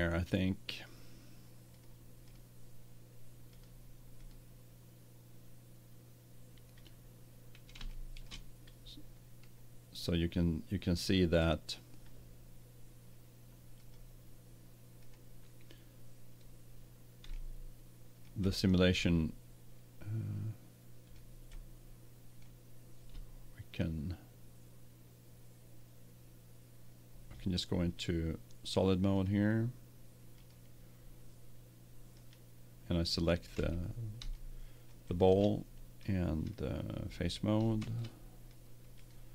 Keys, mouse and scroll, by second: 1.7-6.0 drag, 7.8 space, 15.9-21.2 middle drag, 21.9-23.6 middle drag, 29.1-31.0 drag, 31.0-32.2 middle drag, 32.2-34.1 right drag, 33.5 Tab, 34.5 middle click, 35.8-36.8 middle drag, 36.9-38.6 middle drag, 37.8 ctrl+Tab.